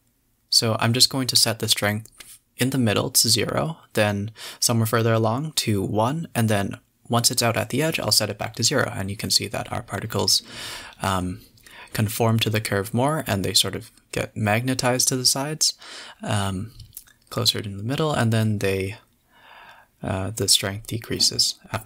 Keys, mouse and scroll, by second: 1.6-2.9 drag, 2.9 space, 4.6 space, 4.8 click, 5.0 g, 5.8 space, 9.5 click, 9.8 click, 10.1 s, 11.5 click, 11.8 s, 14.3 space, 15.1 a, 16.6 click, 17.5 click, 18.7 click, 19.5 KP_7, 19.9 scroll up 7, 20.2 z, 21.3 KP_Decimal.